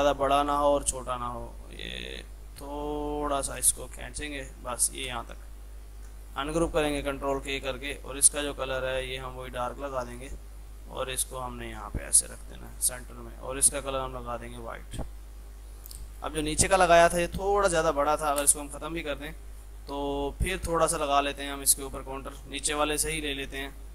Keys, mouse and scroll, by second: 4.8 F3, 5.1 space, 5.9 ctrl+k, 6.4-13.7 drag, 8.4-9.1 typing, 13.4-14.2 typing, 14.6 Up, 16.2 click, 17.5 ctrl+z, 19.1 click, 21.6 click, 22.0 F2, 22.2-23.7 drag.